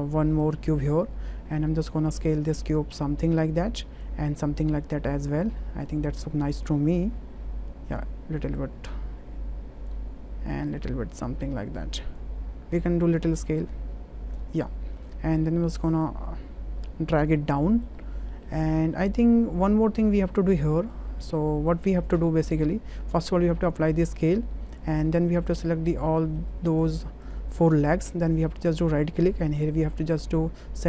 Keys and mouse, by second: 1.4 middle click, 2.3 click, 3.3 click, 4.6-5.8 drag, 6.7-8.0 drag, 8.5-9.9 drag, 10.8-12.1 drag, 12.8-14.3 drag, 14.7 middle click, 15.4 w, 16.1-17.3 drag, 17.5 click, 18.8 middle click, 20.7 middle click, 21.4 middle click, 22.2 middle click, 23.1 ctrl+a, 24.0 ctrl+a, 25.5 drag, 26.1 middle drag, 26.8 shift+drag, 27.5 middle click, 28.7-30.4 right drag.